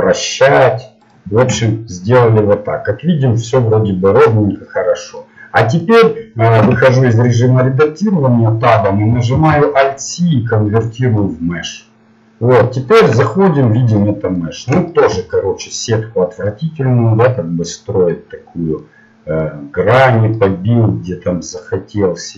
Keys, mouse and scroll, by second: 1.7-3.9 middle drag, 6.6 Tab, 10.8 alt+c, 11.4-12.7 middle drag, 13.0 Tab, 16.6-21.8 middle drag.